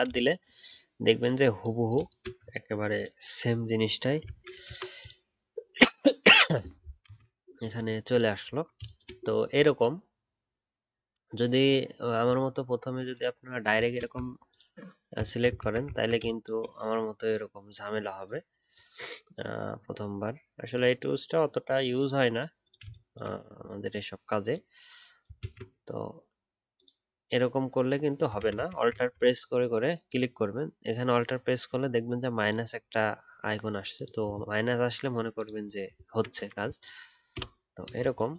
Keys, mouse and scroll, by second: 2.5 scroll down 1, 8.5-9.3 alt+scroll down 1, 14.2 scroll down 1, 15.6 ctrl+z, 15.9 alt+scroll up 2, 25.4 ctrl+z, 28.4 ctrl+z, 28.5 ctrl+z, 28.7 ctrl+z, 30.0 alt+click, 35.6-35.9 alt+scroll down 1, 36.0 alt+scroll up 1.